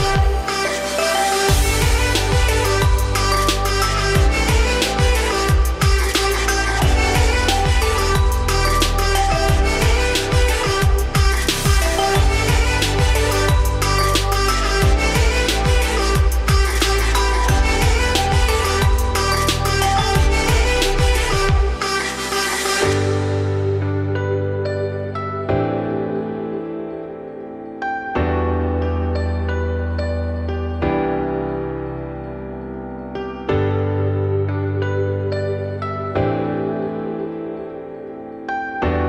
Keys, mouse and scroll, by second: 0.7 click, 1.1 scroll down 4, 1.3 g, 4.2 scroll up 1, 5.0 click, 5.2 Tab, 5.5-6.1 scroll up 2, 6.1 click, 6.4 z, 6.8 click, 7.1 z, 7.4 g, 10.6 shift+middle click, 11.3 scroll down 3, 11.5 middle click, 11.8 Tab, 12.3 ctrl+s, 13.6 shift+click, 14.3 shift+click, 14.6 scroll down 1, 14.7-15.1 middle drag, 15.1 `, 15.7 g, 17.6 shift+click, 17.9 scroll up 3, 18.2 z, 18.5 g, 19.7 `, 20.1-20.4 middle drag, 20.4 z, 20.8 scroll down 1, 21.0-21.4 middle drag, 21.4 `, 22.3 g, 27.5-29.6 scroll down 3, 29.6 scroll down 1, 29.7-31.8 scroll up 3, 31.8-32.7 scroll up 11, 32.7 click, 34.2 alt+x, 35.7-37.0 shift+middle drag, 37.0-39.0 shift+drag.